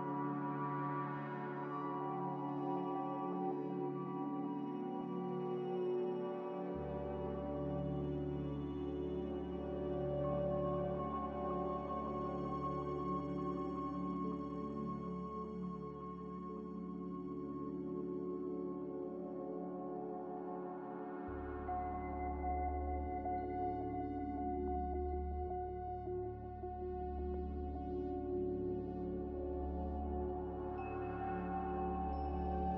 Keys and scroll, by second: 0.9-2.0 typing, 10.2 a, 12.8 ctrl+c, 12.8 ctrl+v, 21.6 ctrl+g, 25.6 n.